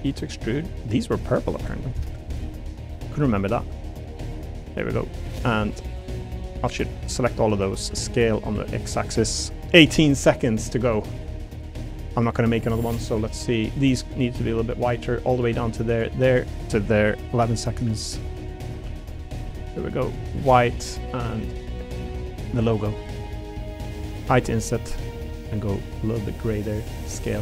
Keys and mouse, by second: 0.1 e, 1.9 ctrl+KP_Add, 2.9 a, 3.1 g, 6.0 middle click, 7.9 s, 8.5 x, 10.1 click, 10.4 middle click, 11.1 middle click, 12.8 middle click, 13.8 click, 15.9 shift+click, 16.6 ctrl+click, 17.7-19.4 typing, 18.4 right click, 20.1 click, 20.7 middle click, 21.5 middle click, 22.5 click, 25.3 a, 25.5 g, 26.3 click, 27.0 s, 27.3 x.